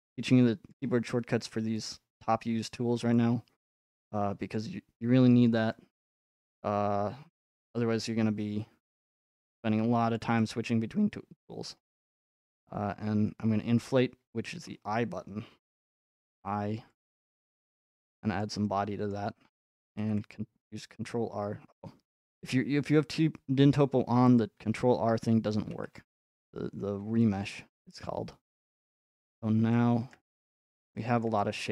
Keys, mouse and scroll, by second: 0.7-2.8 drag, 3.1-5.3 drag, 5.6-7.7 middle drag, 8.8-10.2 middle drag, 10.2-11.6 drag, 11.6-13.8 middle drag, 18.4 click, 19.1 middle click, 24.4-27.0 drag, 27.7-30.8 shift+middle drag.